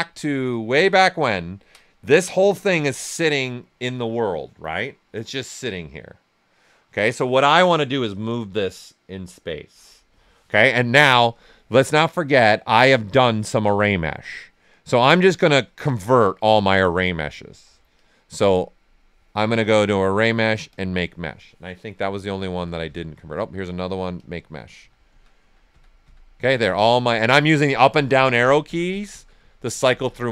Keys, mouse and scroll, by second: 0.5 click, 0.9 alt+right click, 1.3 ctrl+right click, 11.2-17.9 drag, 19.5 shift+click, 19.6 click, 21.9 Down, 24.1 click, 24.7 Down.